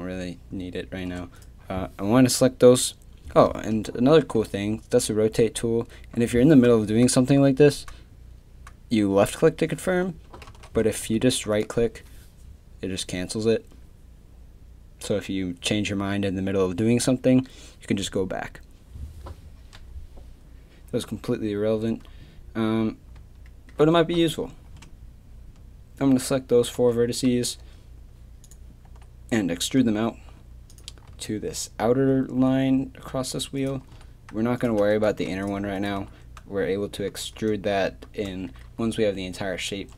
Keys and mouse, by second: 4.2 r, 10.5 ctrl+z, 11.0 r, 22.1-26.0 middle drag, 28.9 e, 31.1 z, 33.6 click, 33.9 g, 34.6 click, 35.1 g, 36.0 g.